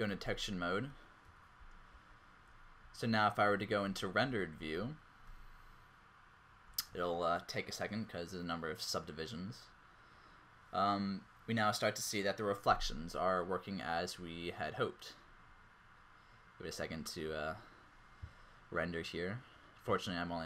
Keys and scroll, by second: 0.2 alt+z, 1.2-4.5 typing, 5.2 alt+shift+z, 8.5 typing.